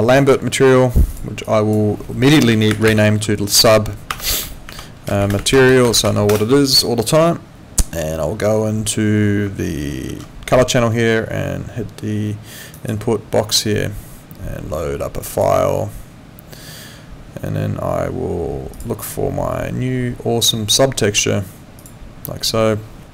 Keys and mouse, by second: 0.1 click, 3.5-6.2 typing, 6.3 Return, 6.3 KP_Enter, 10.1 4.